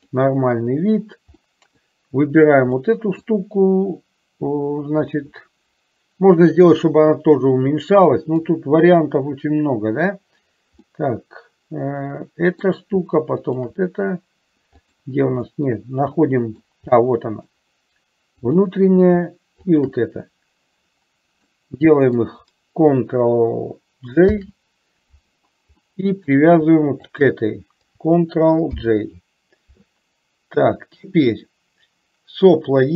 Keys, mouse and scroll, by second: 0.2 click, 1.5 middle click, 3.0 middle click, 7.7 middle click, 11.0-12.9 middle drag, 13.5 shift+click, 14.8 click, 15.7-16.8 middle drag, 17.1 middle click, 18.5 click, 19.7 shift+click, 21.6 middle click, 24.4 ctrl+j, 26.0 middle click, 27.2 shift+click, 28.9 ctrl+j.